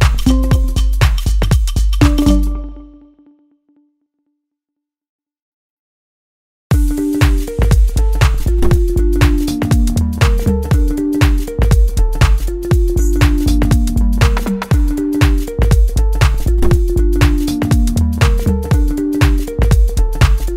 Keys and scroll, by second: 4.5 ctrl+space.